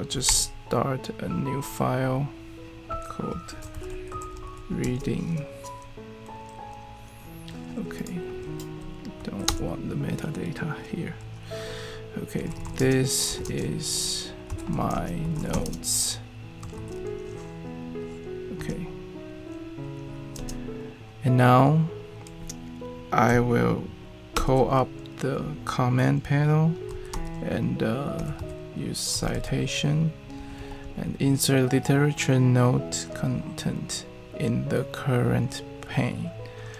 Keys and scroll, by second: 0.3 super+n, 3.2-5.2 typing, 9.2 super+a, 11.6-17.2 typing, 18.6 Return, 20.3 space, 24.3 super+p, 26.9-31.3 typing.